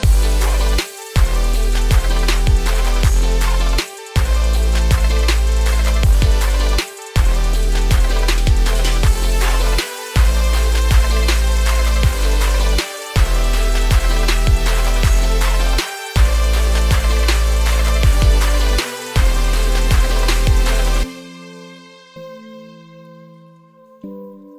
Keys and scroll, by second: 5.4 ctrl+g, 23.6 ctrl+space.